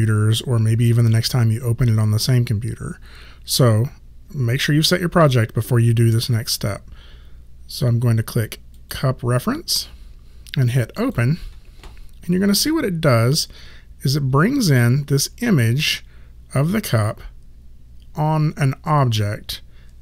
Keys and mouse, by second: 8.8 click, 11.0 click.